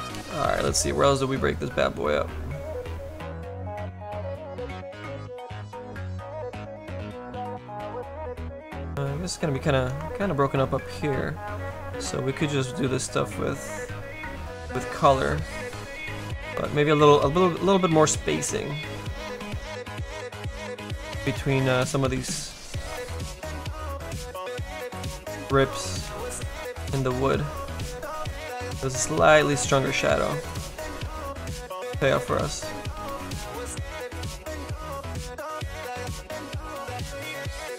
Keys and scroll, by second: 11.5 s.